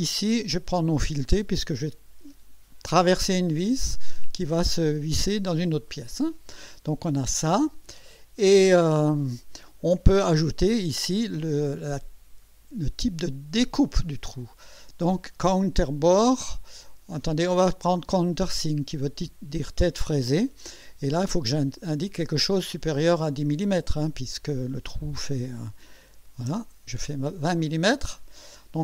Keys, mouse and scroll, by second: 7.1-8.1 drag, 14.4 click, 15.6 click, 17.2 click, 18.4 click, 23.7 click, 26.1 KP_2, 26.5 KP_0, 27.5-28.8 drag.